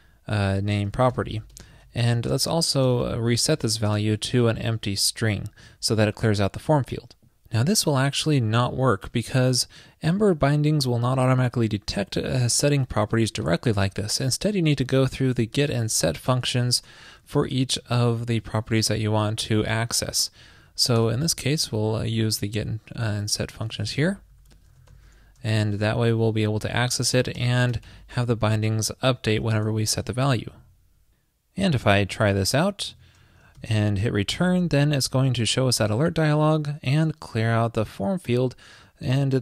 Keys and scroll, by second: 1.5 alt+shift+Left, 2.2 super+c, 3.0 super+v, 16.6 alt+shift+Right, 17.9 alt+shift+Left, 21.3 super+Right, 22.4 alt+Left, 24.9 alt+shift+Left, 26.4 super+Right, 28.9 shift+super+Left, 29.7 super+Right, 29.9 super+s.